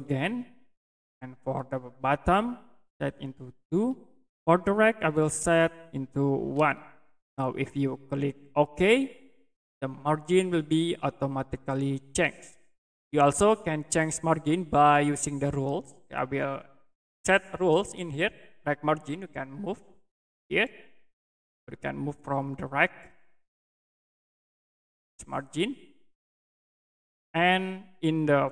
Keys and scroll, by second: 3.7 2, 6.5 1.